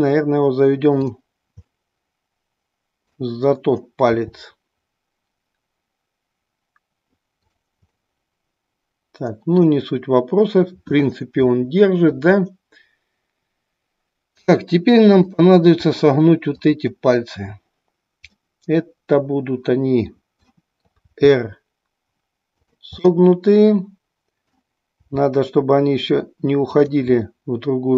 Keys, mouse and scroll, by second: 1.7-3.3 middle drag, 3.3-4.2 scroll down 1, 4.2 r, 7.6 click, 8.1-9.7 middle drag, 11.5-12.3 middle drag, 15.1-16.6 drag, 18.5-20.7 middle drag, 21.1 r, 22.7 drag, 23.0-24.6 middle drag, 25.1 r, 26.8 click, 27.3 middle click.